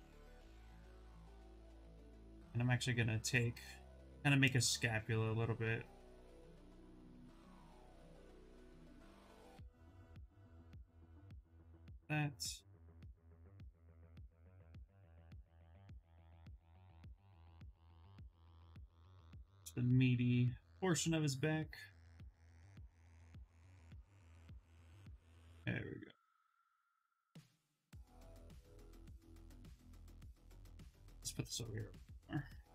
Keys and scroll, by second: 2.1 s.